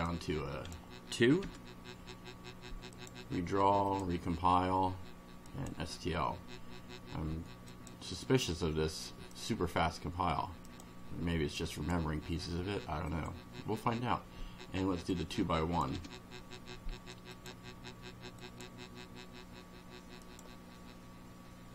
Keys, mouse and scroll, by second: 0.1-0.9 drag, 1.4 2, 2.9 click, 3.9 click, 5.5 click, 7.7 click, 9.3 click, 10.7 click, 11.7 click, 13.1 click, 15.1 click, 15.9 1, 17.3 click, 18.4 click, 20.3 click.